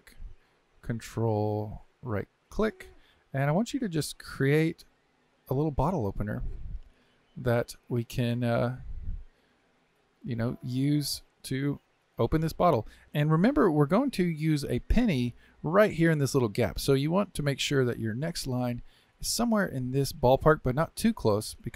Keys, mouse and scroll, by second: 2.6-6.9 ctrl+right drag.